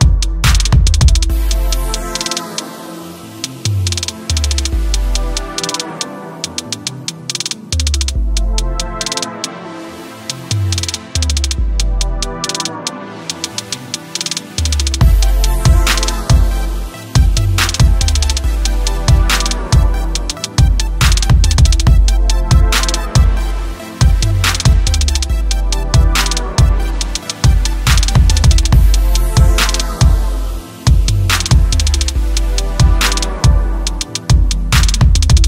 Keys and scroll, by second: 5.5 ctrl+t, 12.3 ctrl+t.